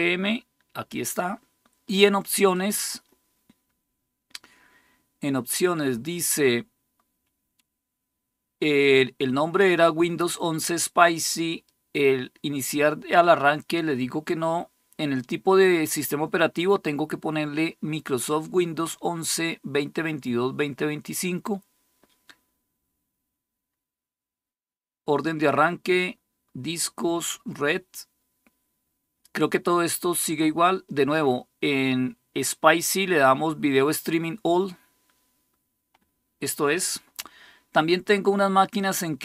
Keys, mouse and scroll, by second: 2.3-39.2 drag.